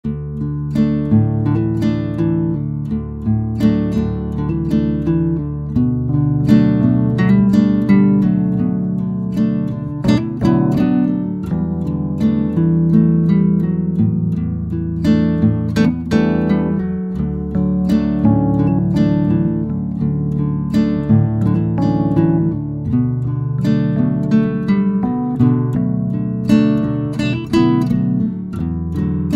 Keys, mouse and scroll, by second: 0.9-6.0 drag, 13.9 space, 14.2-14.6 drag, 14.6 middle click, 15.0 space, 16.1 middle drag, 16.7 shift+middle drag, 17.6 space, 18.6 space, 19.4-19.7 middle drag, 19.7 drag, 21.7 a, 22.2 x, 24.0 KP_1, 25.9-29.2 drag.